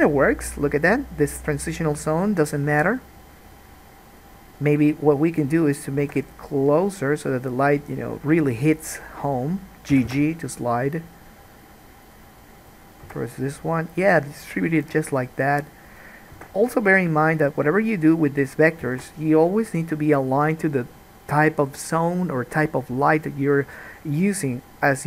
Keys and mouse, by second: 0.0-1.7 middle drag, 6.2 g, 9.0 click, 10.1 g, 12.8 click, 14.4 g, 16.5 g, 19.0 alt+a.